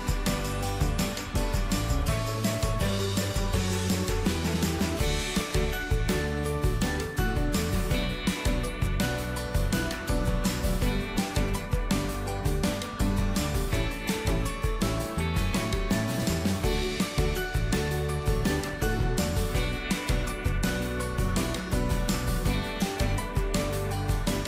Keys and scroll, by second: 17.3 ctrl+d.